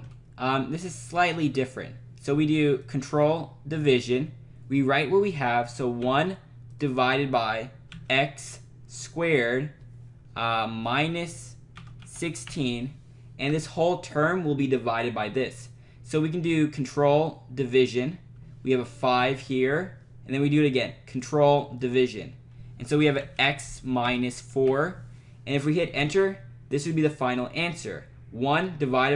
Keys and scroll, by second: 3.7 ctrl+/, 6.0 1, 7.9 x, 11.5-13.0 typing, 13.5 Right, 17.6 /, 19.2 5, 23.1 x, 24.1 -, 24.6 4, 26.0 Return.